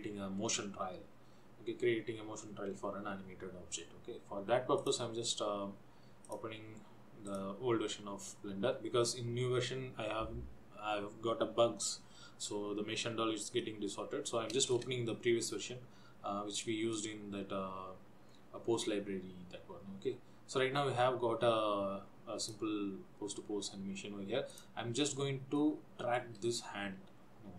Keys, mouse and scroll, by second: 5.0 click.